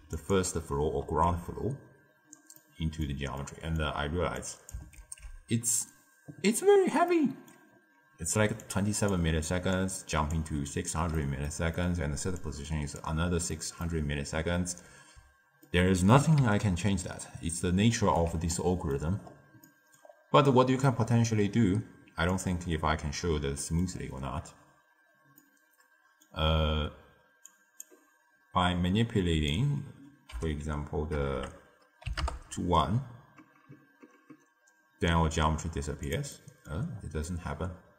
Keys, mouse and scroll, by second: 1.6 alt+shift+click, 2.5-4.3 middle drag, 4.3 click, 6.3 ctrl+x, 7.0-7.7 middle drag, 7.7 scroll up 1, 8.3 d, 8.6 click, 9.1-9.5 d, 9.7-10.3 drag, 10.3 d, 10.4 d, 11.1 middle click, 12.0 d, 12.4-13.0 drag, 13.0 d, 13.1 d, 13.4-14.1 middle drag, 14.1-14.5 scroll down 1, 14.5 d, 15.6-16.3 ctrl+middle drag, 16.3 d, 16.4-18.2 right drag, 18.2 d, 18.4-19.1 middle drag, 19.1-19.6 scroll up 3, 19.6 middle click, 20.0-20.4 scroll up 1, 20.4-22.2 middle drag, 22.2 click, 23.5 middle click, 23.9-25.0 scroll up 1, 25.0 scroll down 2, 25.3-27.4 middle drag, 27.4 click, 28.6-31.3 drag, 31.3 BackSpace, 36.0 click, 36.2 middle click, 36.9 scroll down 4, 37.1-37.9 middle drag.